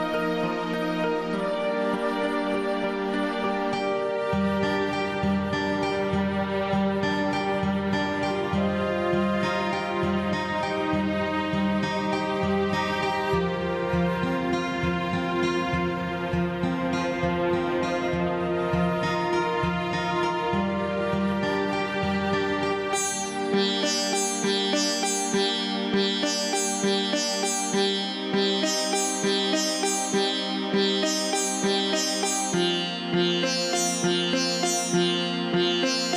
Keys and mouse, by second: 0.0 click, 2.5-4.6 drag, 6.8 click, 9.5 click, 12.8 click, 13.7 x, 14.7 click, 20.6 click, 23.1 click, 27.2 click, 29.9 click, 34.6 click, 35.6 x.